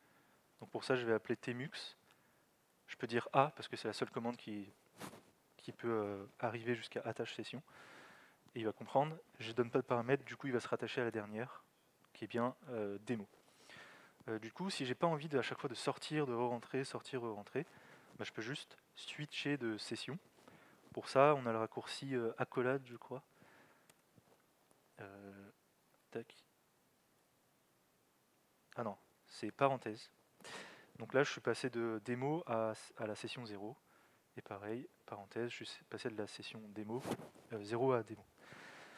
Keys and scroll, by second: 0.4-1.3 typing, 4.1 typing, 20.9 alt+x, 23.0 {, 26.0 alt+x, 27.2 {, 29.9 (, 34.0 alt+x, 34.7 (.